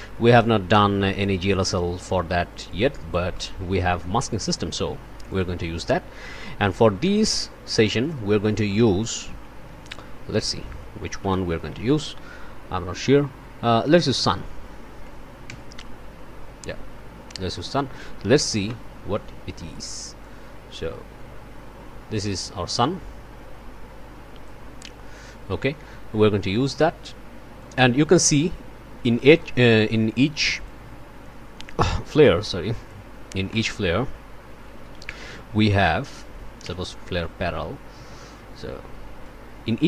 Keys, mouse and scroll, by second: 0.1 middle click, 2.7 click, 3.4 middle click, 3.9 middle click, 4.7 middle click, 5.3 click, 8.3 Tab, 9.4-12.2 typing, 13.7 Down, 15.5 Return, 17.7 click, 18.6 1, 20.2-24.7 drag, 24.7-25.3 scroll down 1, 25.5 click, 27.0 click, 29.2 click, 29.9 click, 30.7 1, 33.5 Tab, 34.4-35.4 typing, 35.5 Down, 36.3 Up, 36.6 Return, 39.2 click.